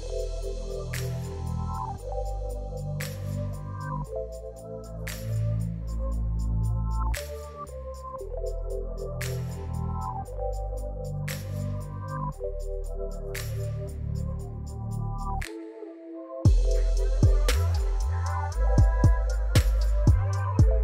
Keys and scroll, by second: 0.8 shift+d, 1.7 z, 4.1 p, 5.0 Tab, 7.2 Tab, 8.6 a, 10.1 z, 12.6 shift+r, 14.1 Tab, 15.0 g.